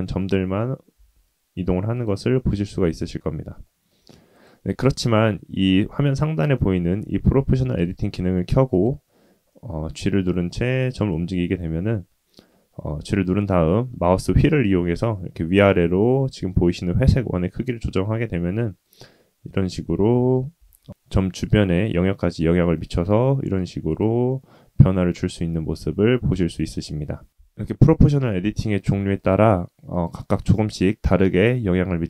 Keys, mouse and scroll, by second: 0.0 middle click, 0.9 g, 2.3 middle click, 3.6 shift+middle click, 4.3 click, 7.7 click, 8.7 click, 9.5 middle click, 10.5 g, 19.1 middle click, 20.1 shift+middle click, 20.5 g, 24.2 middle click, 25.4 middle click, 27.9-29.6 drag, 29.9 click, 30.4 g.